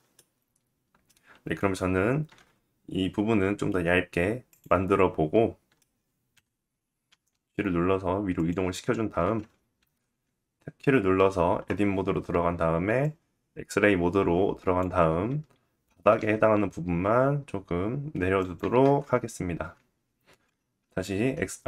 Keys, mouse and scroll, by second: 1.8 s, 4.0-5.9 drag, 4.4 middle click, 5.9 KP_1, 6.6 g, 8.7 Tab, 9.4 alt+z, 12.6-18.1 drag, 15.5 g, 18.3 Tab, 18.3 click, 21.5 alt+z.